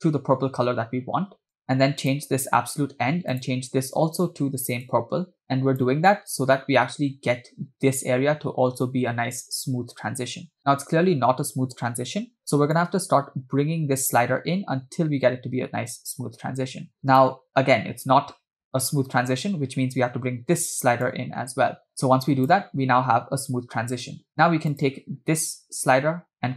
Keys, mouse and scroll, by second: 2.2 click, 3.6 click, 12.8-17.2 drag, 21.1-22.8 drag, 24.7 click, 26.4 click.